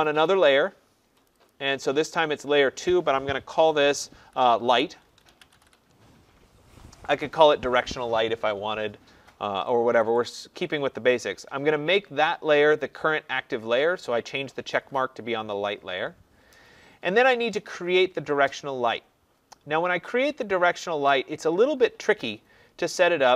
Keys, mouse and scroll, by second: 1.3 click, 1.5 click, 2.9 click, 4.2-6.1 typing, 7.3 click, 10.1 click.